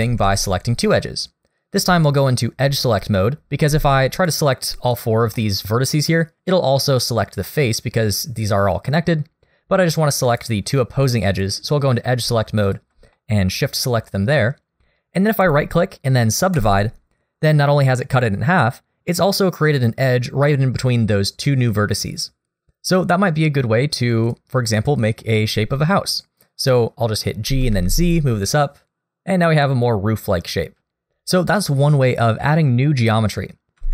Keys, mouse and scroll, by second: 0.0 ctrl+z, 4.2 shift+click, 4.9 shift+click, 5.3 shift+middle click, 7.8-8.4 scroll up 1, 10.3 click, 11.3 click, 12.6 shift+click, 13.1 middle click, 15.4 right click, 24.3 click, 27.5 g, 33.6 ctrl+z, 33.8 ctrl+z.